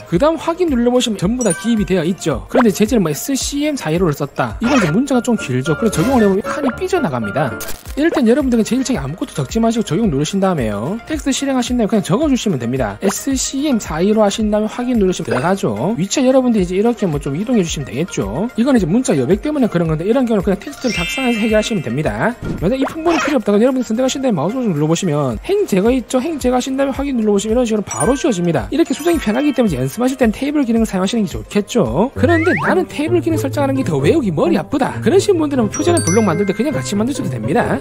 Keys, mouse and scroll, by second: 1.4 click, 3.2-5.1 typing, 5.8 click, 6.6 click, 10.7 click, 11.9 t, 12.6 click, 13.8-15.0 typing, 16.9 click, 18.1 click, 25.0 right click, 26.9 click, 27.7 click.